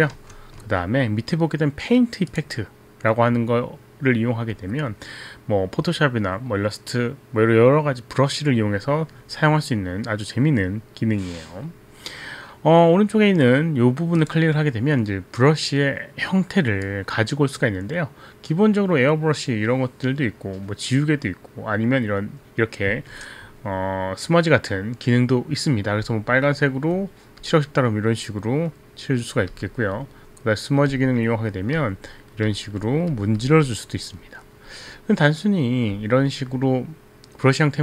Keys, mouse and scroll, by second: 0.1 ctrl+z, 0.2 ctrl+z, 2.4 click, 14.2 click, 16.8 click, 26.2 click, 27.6 click, 29.6 click, 31.0 click, 32.6 click, 33.0 click, 34.5 click, 36.1 click.